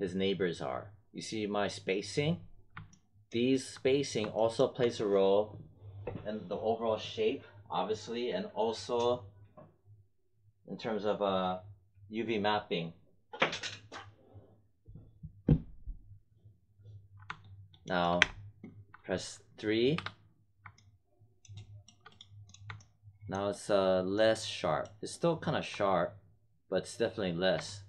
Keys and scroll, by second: 18.1 space, 19.9 3.